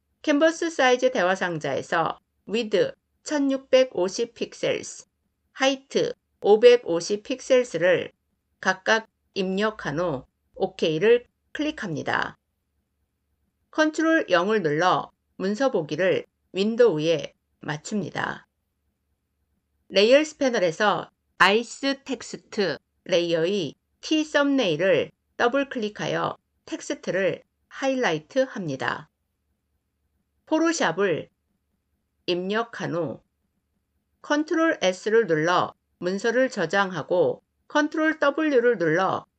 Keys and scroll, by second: 13.7 ctrl+0, 34.1 ctrl+s, 37.4 ctrl+w.